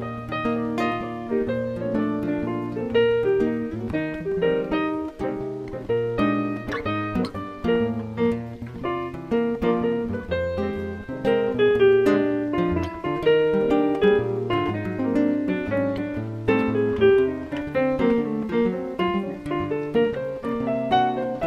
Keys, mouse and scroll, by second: 0.4 Tab, 0.9 middle click, 2.9 click, 4.4 click, 5.1 middle click, 7.0 click, 7.3-7.8 scroll up 5, 8.0 scroll down 1, 8.8 Tab, 10.8 a, 11.0 a, 12.8 click, 13.9 click, 17.6 alt+right click.